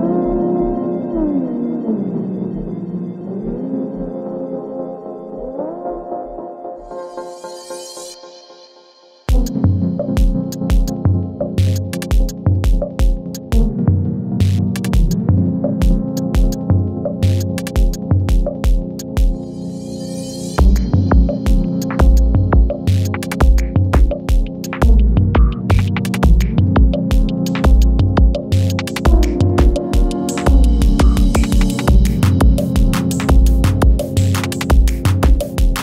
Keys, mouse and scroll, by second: 0.6 ctrl+d, 1.8 v, 2.5-3.4 click, 3.7 ctrl+d, 4.1-6.6 drag, 6.8 ctrl+d, 7.2-8.5 drag, 8.8 ctrl+a, 9.5 ctrl+d, 10.3-11.5 drag, 12.4-14.0 shift+drag, 16.0 ctrl+d, 16.5-18.0 drag, 18.8-20.0 drag, 20.3 ctrl+d, 20.7-22.9 drag, 23.2 ctrl+d, 23.6-25.8 drag, 25.9 ctrl+d, 26.4-28.0 drag, 28.3 ctrl+d, 28.7-30.0 drag, 30.5 ctrl+d, 30.9-32.4 drag, 32.4 ctrl+d, 32.8-34.4 drag, 35.7 space.